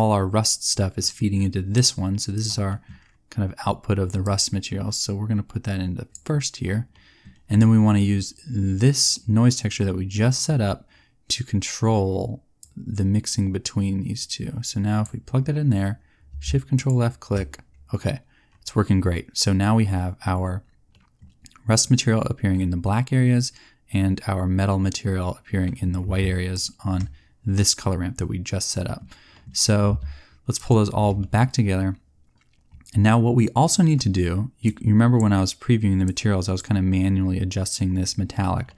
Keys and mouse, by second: 1.7-3.8 drag, 4.2 click, 18.1-19.4 drag, 19.4 middle click, 19.6 click, 31.1-35.1 drag.